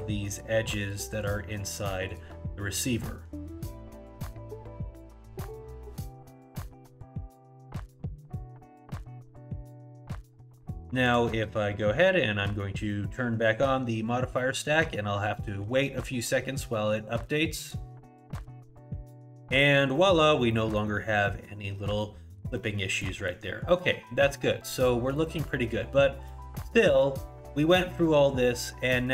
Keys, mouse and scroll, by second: 0.3 shift+click, 0.8 shift+click, 1.2 shift+click, 1.6 shift+click, 2.1 shift+click, 3.0 middle click, 3.6 g, 8.2 scroll down 1, 8.5 middle click, 9.2 scroll down 3, 9.6 middle click, 10.1 scroll down 1, 10.3 middle click, 11.0 click, 17.6 click, 19.7 middle click, 20.3 scroll up 2, 20.5 middle click, 21.0 scroll up 1, 21.3 middle click, 21.7-22.2 scroll down 2, 22.0 middle click, 22.6 middle click, 23.0 middle click, 23.4 scroll down 2, 23.7 middle click, 25.2 middle click, 26.0-26.3 scroll up 1, 26.3 middle click.